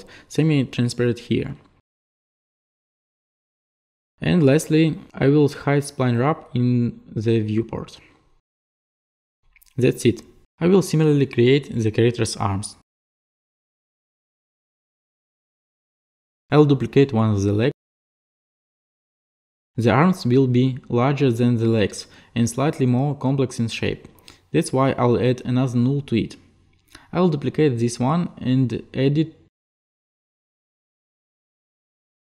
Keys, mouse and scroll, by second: 1.4 click, 4.5 click, 5.4 click, 8.4 click, 9.0 click, 11.6-12.0 scroll down 2, 12.0-12.5 scroll, 13.8 click, 15.1 click, 15.9 click, 16.5 click, 18.7 ctrl+click, 21.2 click, 22.0 alt+click, 22.6 click, 25.3 click, 28.7 ctrl+click, 30.8 click, 31.9 click.